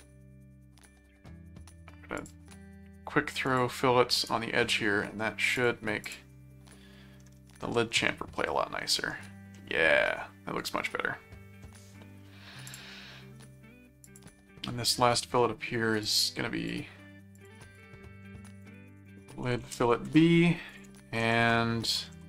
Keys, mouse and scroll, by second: 2.2 click, 3.4 click, 4.2 right click, 5.5 click, 8.1 middle click, 9.6-11.6 middle drag, 12.6 click, 14.0 click, 14.9 middle click, 16.0 click, 17.3 click, 18.5-20.3 typing, 20.7 ctrl+click, 21.2 ctrl+7, 22.1 ctrl+s.